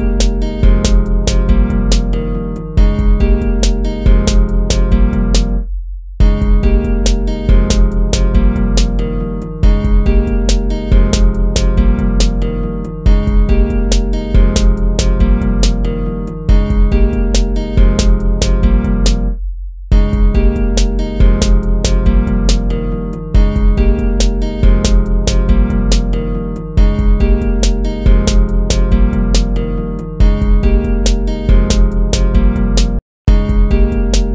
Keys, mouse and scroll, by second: 0.6 ctrl+z, 2.1 ctrl+z, 2.6 ctrl+-, 2.8 ctrl++, 3.4 ctrl+-, 4.0 ctrl+-, 4.6 ctrl++, 5.9 ctrl+-, 9.2 right click, 11.5 right click, 13.0 ctrl++, 17.2 ctrl++, 19.6 ctrl++, 31.1 ctrl+-, 31.4 ctrl+z, 32.3 ctrl+-, 32.9 ctrl++.